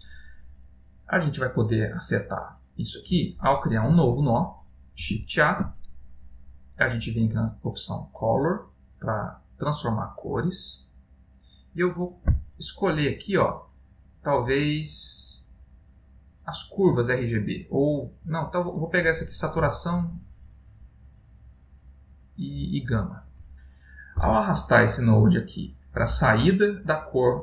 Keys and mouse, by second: 0.5 middle click, 3.5 middle click, 5.1 shift+a, 22.7 typing.